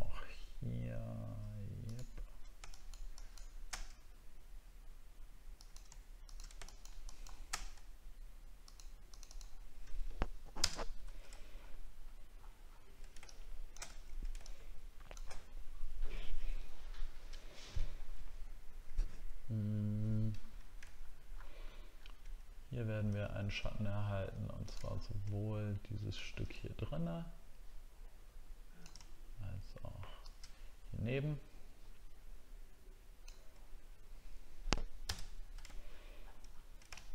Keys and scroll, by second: 10.6 ctrl+BackSpace, 11.0 ctrl+d, 11.5 alt+scroll down 1, 12.4 alt+scroll down 1, 13.9 alt+scroll down 6, 17.4 alt+scroll down 1, 20.9 alt+scroll up 1, 21.9 alt+scroll up 1, 23.1 alt+scroll up 1, 24.9 alt+scroll up 1, 35.1 ctrl+BackSpace, 35.9 alt+scroll down 1, 36.5 alt+scroll down 1.